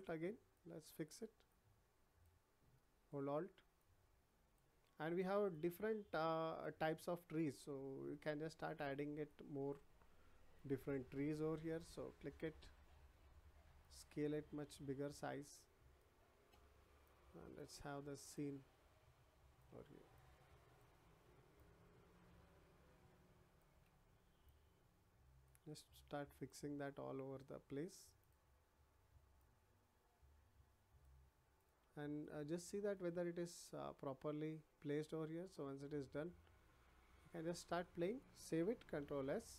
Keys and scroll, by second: 39.0 ctrl+s.